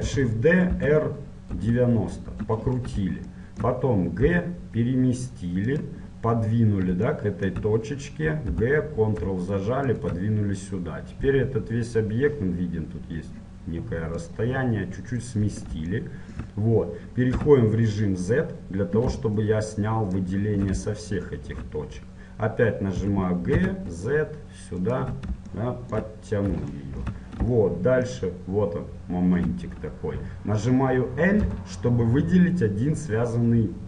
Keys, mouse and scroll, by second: 0.2 shift+d, 3.4-5.2 middle drag, 4.4 g, 6.2-9.4 middle drag, 8.6 g, 10.8-14.3 middle drag, 14.3-16.3 drag, 16.3-20.3 middle drag, 17.5 z, 20.3-23.1 ctrl+shift+drag, 23.1 g, 25.7-31.6 middle drag, 31.6 l.